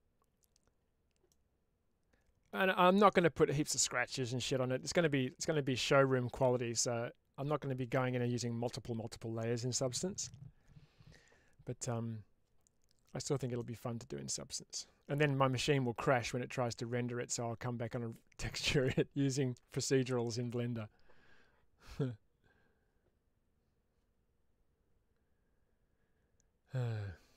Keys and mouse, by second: 1.2-2.4 middle drag, 13.5 shift+middle click.